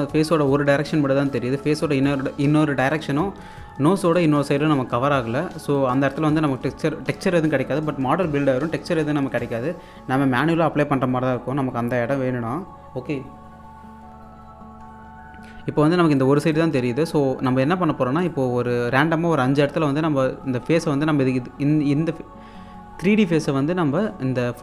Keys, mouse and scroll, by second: 3.7-4.1 scroll up 1, 4.1 click, 5.1-5.8 scroll down 1, 5.8 click, 6.5 scroll down 1, 16.2 click, 20.5 q, 21.2 scroll up 1, 22.6-23.4 scroll down 1, 24.4-24.6 scroll up 1.